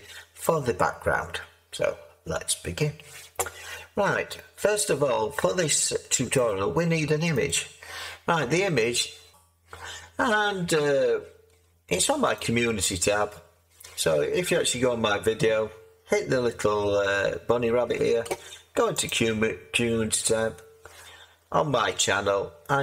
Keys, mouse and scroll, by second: 1.0-7.3 drag, 9.3 click, 9.5 click, 10.0-12.3 middle drag, 10.0 scroll, 12.3-22.3 drag, 22.3-22.8 middle drag, 22.3-22.8 scroll.